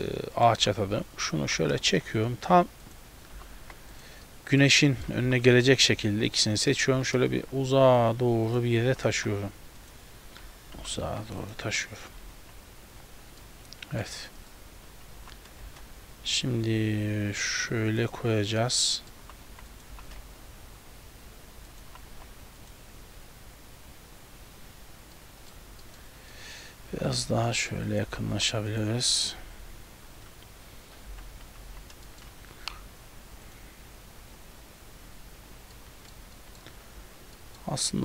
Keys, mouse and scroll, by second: 0.1 middle click, 0.7 g, 1.5 g, 4.3 middle click, 4.9 shift+middle click, 5.3 g, 6.4 shift+right click, 7.0 g, 8.9 g, 12.3 a, 12.5 a, 13.5 middle click, 14.5 right click, 15.2 g, 18.6 middle click, 19.3 g, 20.0 g, 25.2 middle click, 25.9 shift+middle click, 26.1 scroll down 1, 26.4 middle click, 26.9 g, 28.1 g, 31.1 KP_7, 31.7 z, 32.1 shift+middle click, 32.3-32.7 scroll up 2, 32.7 g, 35.8 middle click, 36.4 shift+middle click, 37.0 z, 37.4 middle click.